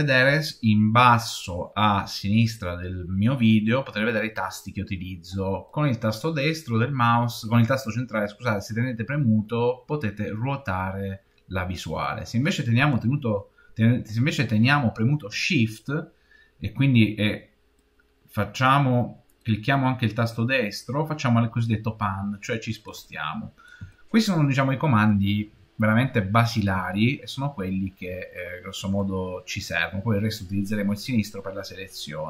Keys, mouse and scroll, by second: 5.5-8.5 middle drag, 17.7 shift+middle click, 20.1-21.2 shift+middle drag, 22.9 middle click, 28.3 middle click.